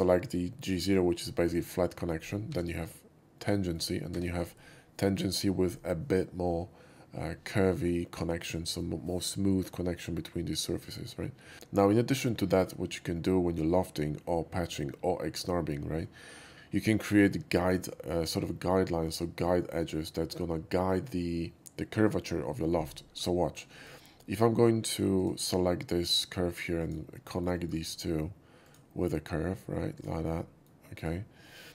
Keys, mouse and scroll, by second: 2.4 Tab, 3.3 middle click, 4.1 Tab, 6.6 Tab, 12.4 shift+middle click, 23.1 scroll up 1, 23.4 shift+middle click, 23.6 shift+middle click, 25.1 shift+click, 26.8 click, 27.2 alt+middle click, 27.5 alt+middle click, 27.8 alt+middle drag, 28.6 alt+click, 29.9 alt+click, 30.3 alt+middle click, 30.9 right click, 31.4-31.7 middle drag.